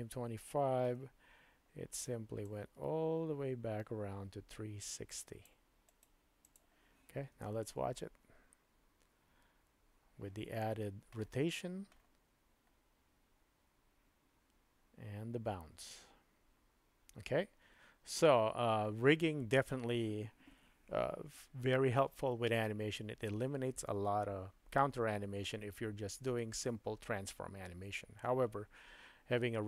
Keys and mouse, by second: 0.9 KP_Decimal, 2.4-5.4 drag, 5.9 right click, 7.3 space.